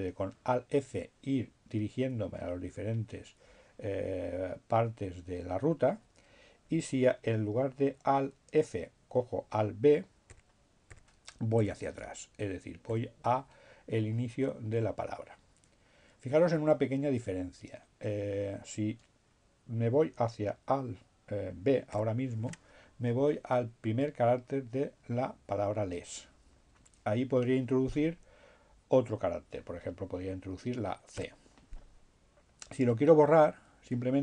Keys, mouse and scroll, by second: 7.6 b, 11.4 b, 11.9 b, 20.1 b, 28.9 c, 33.1 BackSpace.